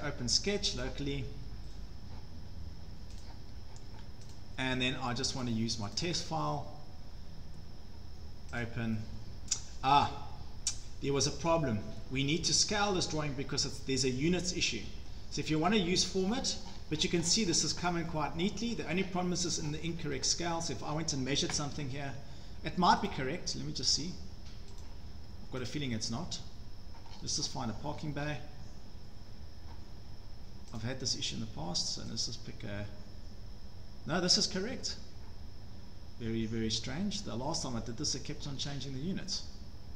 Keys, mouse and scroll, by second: 0.8 click, 3.2 click, 4.3 click, 5.4 click, 6.0 click, 8.6 click, 11.5-13.7 drag, 15.7 middle click, 15.7 scroll down 9, 15.9-18.5 scroll, 18.7-19.1 scroll, 19.6-21.1 scroll, 19.8 Escape, 20.2 Escape, 22.1 Escape, 22.8 scroll, 23.1 click, 24.8 click, 25.7 click, 27.2-27.8 scroll down 7, 27.9 scroll down 3, 28.2 scroll up 7, 30.8 click, 32.3 click, 32.7 scroll, 38.4 scroll down 3, 38.6 scroll.